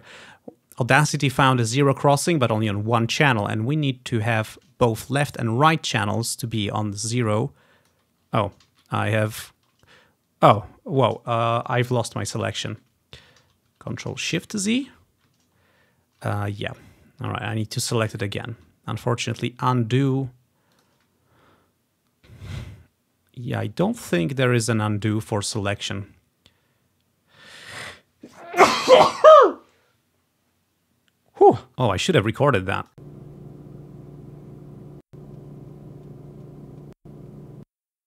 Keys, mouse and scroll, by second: 0.2-0.7 ctrl+scroll up 4, 3.2-3.6 ctrl+scroll down 4, 4.1 ctrl+scroll up 1, 7.1 click, 8.2 ctrl+click, 8.3-10.6 ctrl+scroll down 1, 8.8 z, 10.6-12.4 scroll down 1, 12.8 ctrl+y, 13.5 ctrl+y, 13.8 ctrl+y, 14.5 ctrl+shift+z, 15.9-18.5 ctrl+scroll down 4, 18.5 ctrl+scroll up 1, 20.8-23.2 drag, 25.9-27.4 drag, 32.0 click, 33.0 click, 35.1 click, 35.2-36.5 drag, 37.1-38.0 drag, 37.8 space.